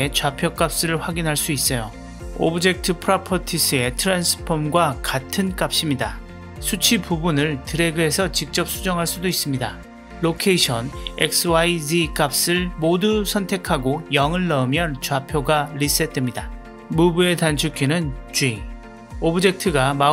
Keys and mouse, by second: 4.3-5.7 drag, 6.5 click, 7.6-8.9 drag, 10.6-13.1 drag, 17.4 click, 18.8 g.